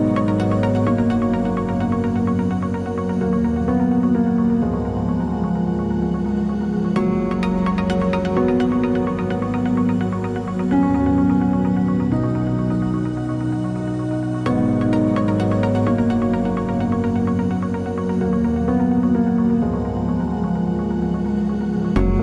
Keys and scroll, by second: 11.2-12.0 typing, 16.3 super+d.